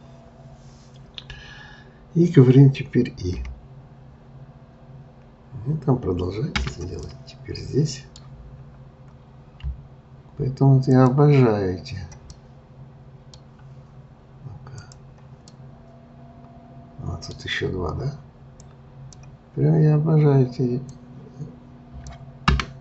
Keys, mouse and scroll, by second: 7.0-8.6 middle drag, 8.6-9.1 scroll up 2, 10.9 click, 12.3-13.5 middle drag, 13.5-14.0 scroll down 1, 14.7 click, 15.5-18.6 middle drag, 18.6 click, 20.8 click, 22.5 Escape.